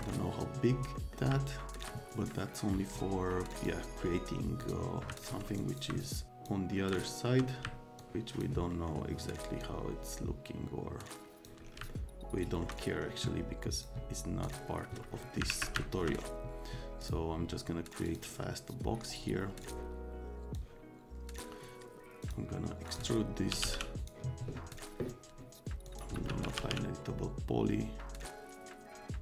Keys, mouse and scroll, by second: 1.0 middle click, 1.4 alt+middle click, 2.4 click, 3.5 click, 4.6 click, 5.1 alt+middle click, 5.5 ctrl+middle click, 6.3 click, 6.7 alt+middle click, 7.4 alt+middle click, 8.0 click, 8.7 middle click, 9.6-11.4 drag, 11.8 alt+click, 12.8 click, 13.0 middle click, 13.7 click, 14.4 click, 15.2 middle click, 15.5 alt+q, 15.7 alt+click, 17.0 click, 18.0 click, 19.6 click, 20.5 click, 22.2 click, 22.9 click, 23.2-24.1 typing, 24.0 click, 24.7 click, 25.8 click, 26.1-27.1 typing, 28.2-29.2 alt+middle drag.